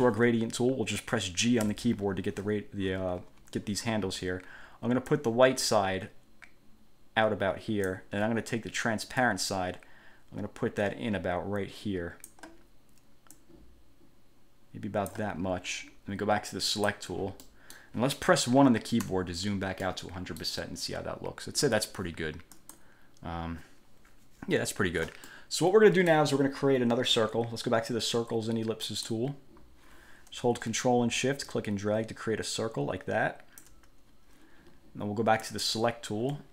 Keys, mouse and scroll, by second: 1.8 g, 5.3-8.3 drag, 9.4-12.7 drag, 13.5-15.5 drag, 16.9 click, 17.6 middle click, 19.2 1, 20.0 middle click, 22.7 click, 25.4-26.5 middle drag, 29.1 click, 31.7-34.0 ctrl+shift+drag, 35.6 click.